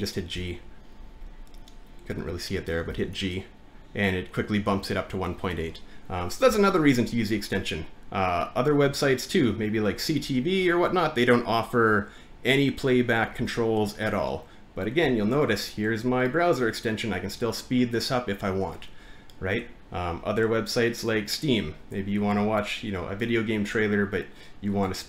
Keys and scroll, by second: 0.3 g, 14.6 typing, 22.7 typing, 24.0 typing.